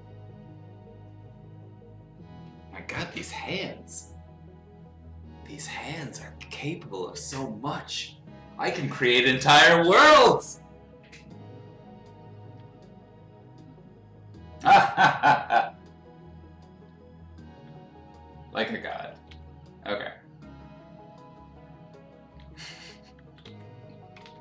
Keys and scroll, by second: 19.3 x, 22.4 x, 23.2 ctrl+z, 23.4 x, 24.2 ctrl+z.